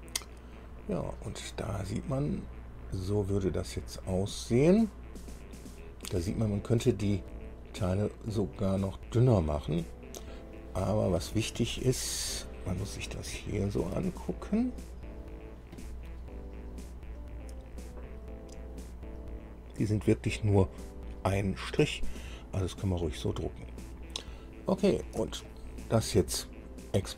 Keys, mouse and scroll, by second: 0.8-1.2 scroll down 1, 1.2 scroll up 1, 1.6-8.1 right drag, 9.8-10.6 scroll down 2, 10.7-11.5 right drag, 11.7-12.5 shift+right drag, 12.6-13.4 shift+right drag, 13.5-15.5 shift+right drag, 15.9-24.6 right drag, 25.0 scroll down 1, 25.7-26.5 shift+right drag.